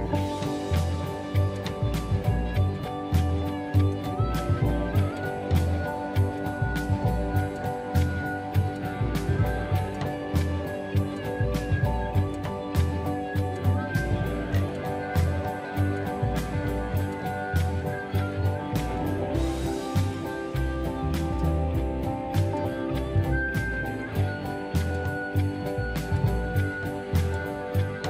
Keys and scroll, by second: 14.7 space, 22.8-26.4 typing, 24.3 Return.